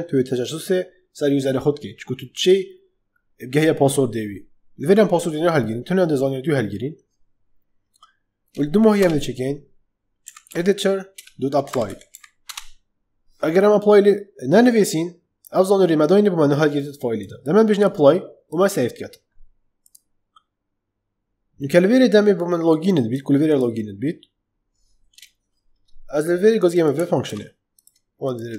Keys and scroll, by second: 8.8 Return, 9.9-12.5 typing, 11.1 Return, 27.2 ctrl+c.